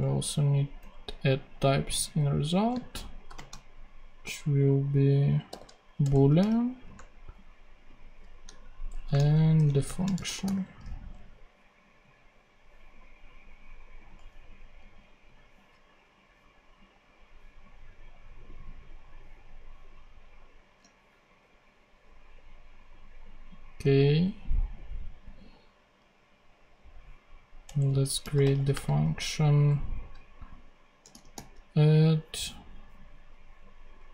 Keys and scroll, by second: 0.7 super+BackSpace, 2.5 Left, 3.2 shift+;, 3.2 shift+space, 5.4 b, 5.9 Return, 6.3 ,, 6.8 BackSpace, 8.4-10.8 typing, 27.6 Return, 27.9-29.0 typing, 30.7-31.5 typing.